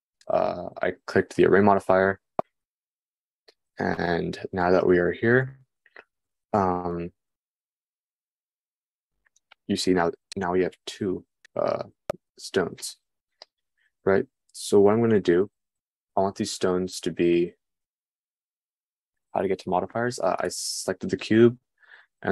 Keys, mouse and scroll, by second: 21.3-22.3 middle drag.